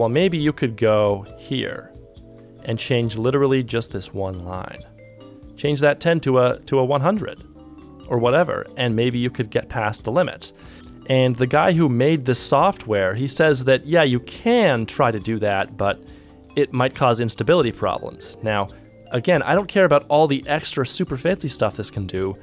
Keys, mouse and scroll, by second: 10.7 ctrl+Tab.